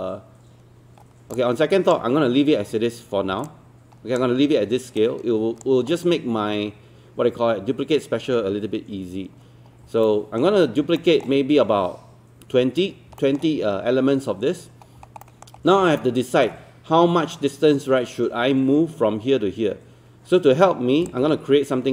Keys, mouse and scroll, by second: 1.4 alt+click, 2.5-3.3 scroll down 1, 3.5 alt+click, 5.0 right click, 9.7 scroll down 1, 10.1 alt+middle click, 10.6 scroll down 1, 11.0 alt+middle click, 13.2 alt+middle click, 14.8 scroll up 1, 15.2 alt+middle click, 16.0 alt+middle click, 21.2-21.9 drag.